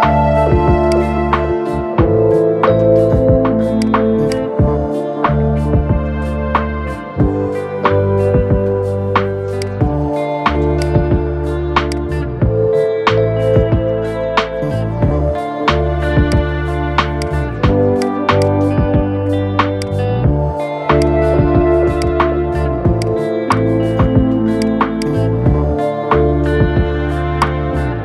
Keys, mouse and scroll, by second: 0.6-7.0 drag, 9.3-13.6 drag, 13.9 scroll down 3, 14.4 scroll up 2, 16.0-16.9 drag, 19.5 click, 20.7 click, 21.7 click, 25.6 scroll down 3, 26.6 Tab, 27.1 click, 27.5 scroll up 3.